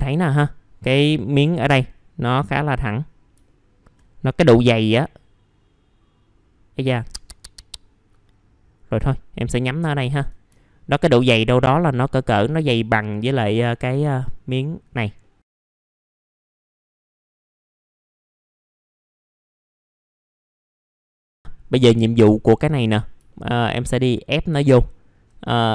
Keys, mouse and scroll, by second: 3.4 alt+middle click, 4.1-4.8 scroll up 1, 4.8-9.5 drag, 9.7 alt+middle click, 10.5 alt+middle click, 12.7 click, 14.0 alt+middle click, 15.2 alt+middle click, 15.5 scroll up 1, 15.6 alt+middle click, 15.9 alt+middle click, 16.1 scroll up 1, 16.5 click, 18.0 click, 19.0 click, 19.5 scroll down 1, 19.7 alt+middle click, 20.0 scroll down 1, 20.2 alt+middle click, 20.8 click, 21.0 alt+middle click, 21.2 middle click, 21.3 alt+middle click, 22.2 scroll up 1, 22.4 alt+middle click, 22.9 middle click, 23.3 alt+middle click, 24.8 alt+middle click, 25.6 scroll up 1.